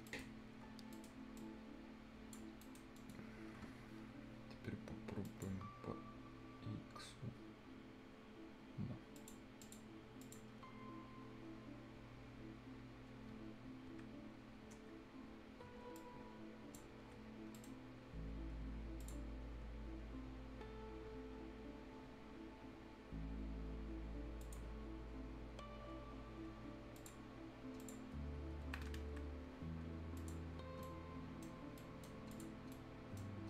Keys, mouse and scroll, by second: 0.1 right click, 0.8 scroll down 1, 0.9 right click, 1.4 click, 2.6 right click, 3.0 middle click, 5.2 click, 8.3 scroll up 1, 9.2 click, 10.5 click, 10.5 scroll down 1, 10.9-11.5 scroll up 1, 13.9 Escape, 14.4 scroll down 1, 14.6-15.3 scroll up 1, 15.8 scroll down 1, 16.0 ctrl+click, 17.5 right click, 18.2-18.5 scroll down 1, 19.0 click, 19.5-21.1 scroll up 1, 26.1-26.5 scroll up 1, 27.0 click, 27.4-27.8 scroll down 1, 27.8 click, 28.2 scroll down 1, 28.8 scroll up 1, 28.9 Escape, 30.2 click, 30.5 scroll down 1, 30.7 scroll up 1, 30.8 right click, 31.6 scroll up 1, 31.8 right click, 32.3 click, 32.6 scroll down 1, 32.7 right click, 33.3 scroll up 1.